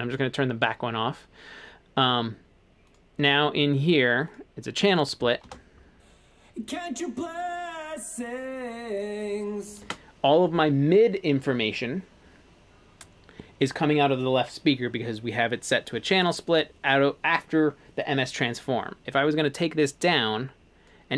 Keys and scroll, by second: 5.5 space, 9.9 space.